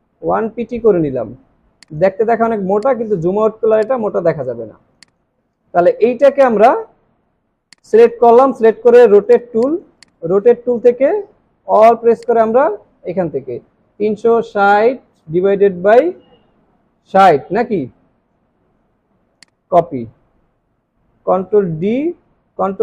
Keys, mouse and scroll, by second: 3.2-3.5 alt+scroll down 1, 3.8 space, 4.0 alt+scroll down 1, 4.4 alt+scroll up 1, 7.6 alt+scroll down 1, 9.4 space, 9.6 double click, 10.0-10.4 alt+scroll up 2, 12.2 alt+click, 13.8-15.2 typing, 16.7 typing, 20.3 alt+scroll down 1.